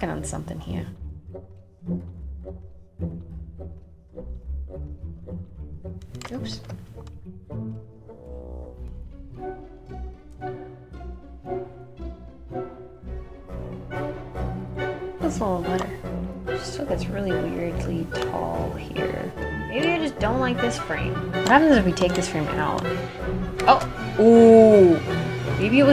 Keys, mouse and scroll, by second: 0.9 click, 15.6-17.9 drag, 23.5 space.